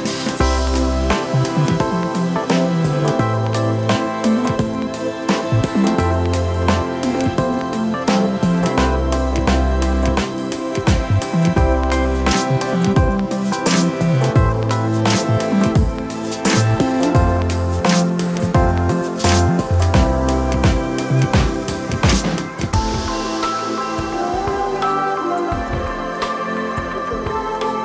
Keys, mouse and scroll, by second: 1.8 e, 5.1 middle click, 6.9-8.0 drag, 9.9 Tab, 10.7-11.9 ctrl+middle drag, 12.8 shift+d, 13.7 KP_3, 14.3 g, 17.0 g, 20.6 click, 21.2 Tab, 22.7 click, 24.9-26.1 drag, 27.4 alt+click.